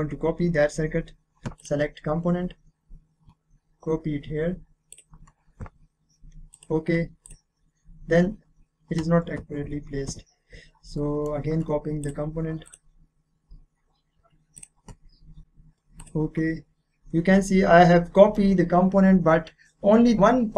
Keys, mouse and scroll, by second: 1.6 click, 2.9-4.2 scroll up 1, 4.9 click, 9.3 click, 9.6 ctrl+z, 11.0 middle click, 12.0 click, 14.2-14.5 scroll up 1, 14.5 click, 15.4 click, 16.8 scroll down 1, 17.8-20.2 middle drag.